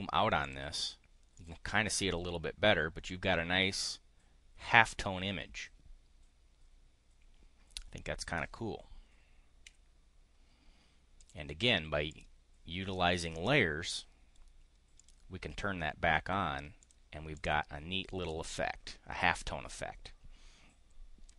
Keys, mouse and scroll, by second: 0.4 click, 1.2 click, 9.6 5, 11.2 click, 12.1 click, 13.0 click, 15.0 click, 16.8 click, 17.3 click.